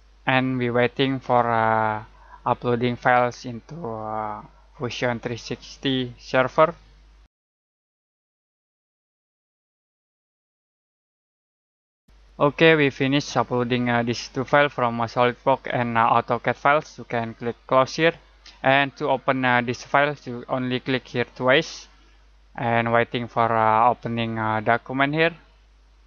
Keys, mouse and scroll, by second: 17.9 click, 21.2 click.